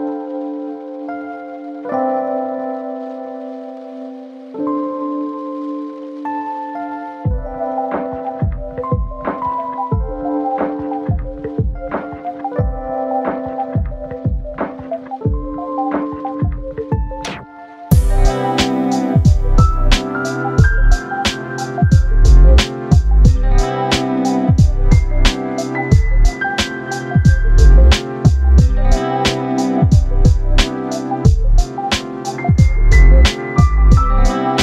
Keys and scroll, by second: 17.4 ctrl+t.